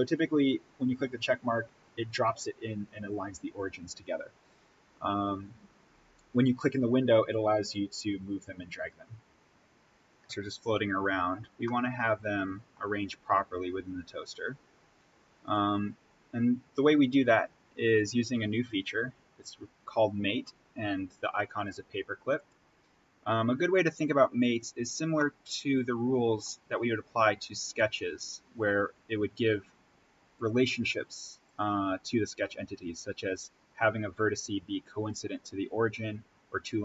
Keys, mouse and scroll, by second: 7.6-11.4 drag, 11.4 scroll down 1, 11.6-15.4 middle drag, 15.4 click, 22.3 click, 24.4-25.0 scroll down 1, 25.1-26.6 middle drag, 26.6-27.2 scroll up 1.